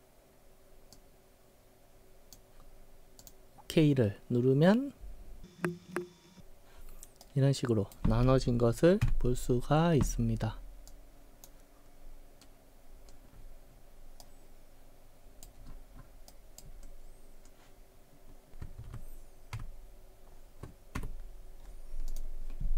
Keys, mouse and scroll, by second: 0.9 click, 3.2 click, 7.3 right click, 9.1 w, 10.9-11.5 drag, 12.1 scroll up 1, 12.5-13.1 middle drag, 13.4-13.9 scroll up 8, 14.3-15.5 right drag, 15.7-16.1 scroll up 8, 16.3 right click, 16.9-17.5 scroll up 1, 18.9 ctrl+z, 19.6 ctrl+z, 22.1 click.